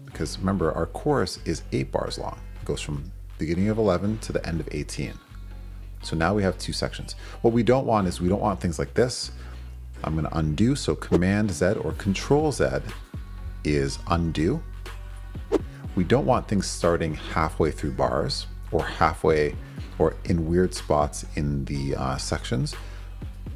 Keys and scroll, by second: 14.4 super+z.